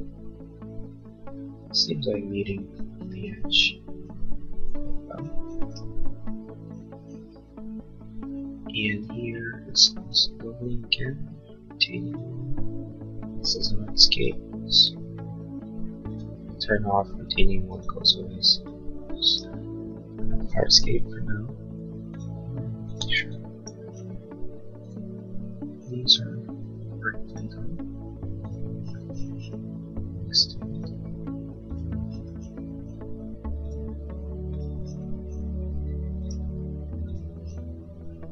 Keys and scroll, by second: 4.8 l, 8.9 space, 20.9 l.